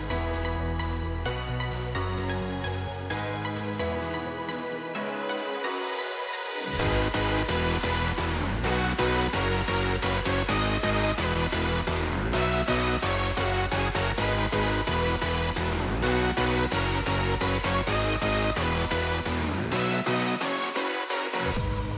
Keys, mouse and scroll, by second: 1.7 middle click, 5.6 middle click, 7.9 middle click, 10.4 right click, 12.0 right click, 16.1 right click, 16.1 middle click, 17.3 right click, 18.7 right click, 19.4 middle click, 19.9 right click, 20.6 middle click.